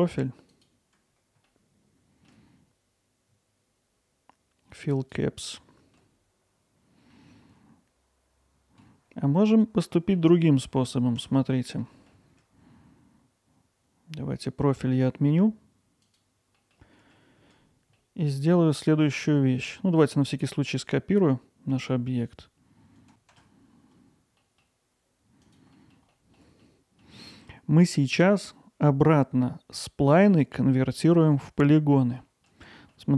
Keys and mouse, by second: 1.5 alt+middle click, 5.0 click, 5.6 alt+middle click, 7.1-8.8 alt+middle drag, 9.8 middle click, 11.9 alt+middle click, 16.1 click, 16.6 middle click, 17.0 alt+middle click, 18.0 alt+middle drag, 18.7-19.3 middle drag, 19.6 middle drag, 24.4 middle click, 25.4 click, 25.8 middle drag, 26.1 alt+middle drag, 26.6-27.0 middle drag, 27.2 alt+middle click, 32.2 middle drag, 32.8 alt+middle click.